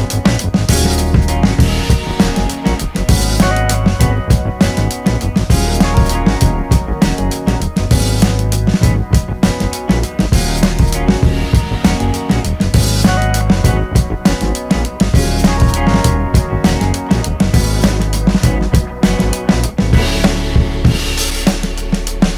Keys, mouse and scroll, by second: 0.3 click, 0.5 middle click, 1.0-3.0 drag, 3.0 middle click, 3.4 click, 4.3 middle click, 4.5-6.1 drag, 6.1 middle click, 6.5-8.0 drag, 8.0 middle click, 8.3 click, 8.5 middle click, 8.7 click, 9.3 middle click, 9.7 click, 10.3 middle click, 10.6 click, 11.5 middle click, 12.1 click, 12.5 middle click, 13.1-14.8 drag, 14.8 middle click, 14.9 scroll down 1, 15.1 shift+middle click, 15.6-17.0 drag, 17.0-19.2 shift+middle drag, 19.2 click, 19.5 middle click, 20.4 click, 21.1-22.3 drag.